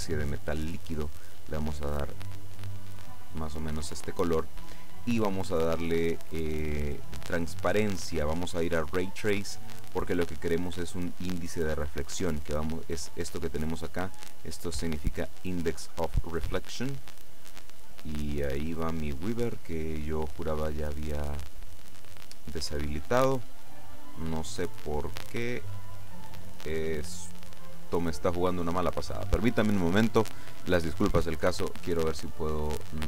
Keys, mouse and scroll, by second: 0.6 click, 2.4 click, 3.8-5.4 scroll down 1, 7.2 click, 9.3 click, 23.8 click, 25.9 click.